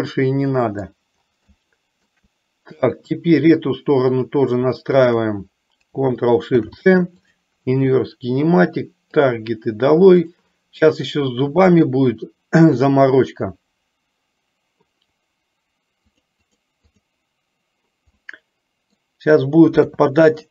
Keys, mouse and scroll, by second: 0.2 middle click, 1.7-2.4 shift+middle drag, 4.2-4.6 drag, 5.0 shift+click, 6.7 ctrl+shift+c, 9.2 click, 16.2 click, 16.7 click, 17.2 click, 18.4 middle click, 20.0 KP_3.